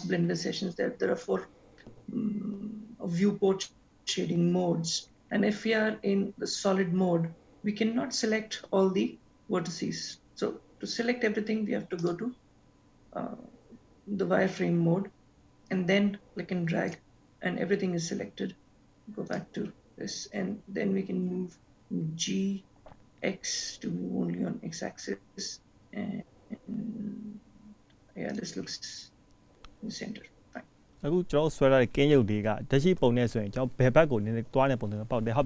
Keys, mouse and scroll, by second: 12.1 click, 15.9 click, 19.5 click, 21.4 g, 33.2 click.